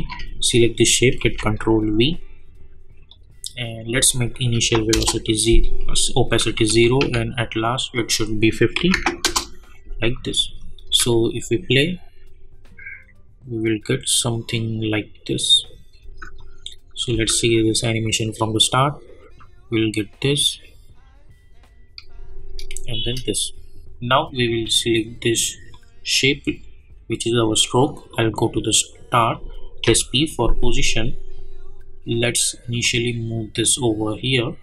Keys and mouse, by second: 0.0 ctrl+c, 0.6 click, 1.2 ctrl+v, 3.1 click, 4.9 Return, 6.4 k, 6.9 k, 7.3 k, 7.9 click, 9.2 Return, 10.3 click, 10.8 space, 16.0 space, 16.3 click, 17.1 space, 22.1 space, 25.7 click, 28.1-29.8 drag, 29.8 p, 32.8-34.6 drag.